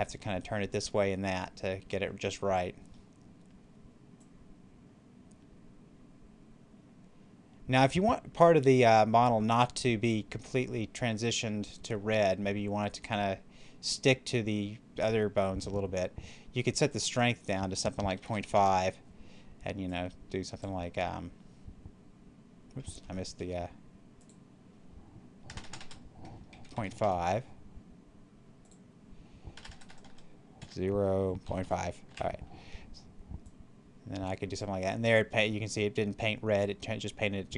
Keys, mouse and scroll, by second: 4.1-12.4 drag, 16.8 click, 19.7-22.8 drag, 22.8 ctrl+z, 24.0 click, 25.3 BackSpace, 28.5 click, 29.4 BackSpace, 30.5-31.5 typing, 32.0 Return, 33.3-37.0 drag.